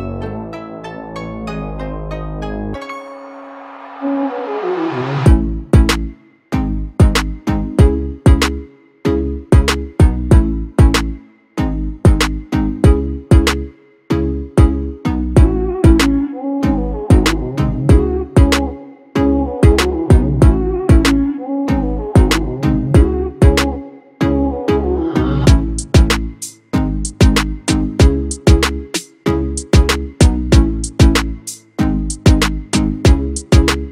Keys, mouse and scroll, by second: 2.8 ctrl+-, 3.1 ctrl+-, 5.9 ctrl+-, 6.3 alt+shift+click, 27.7 BackSpace, 27.8 BackSpace, 28.1 8.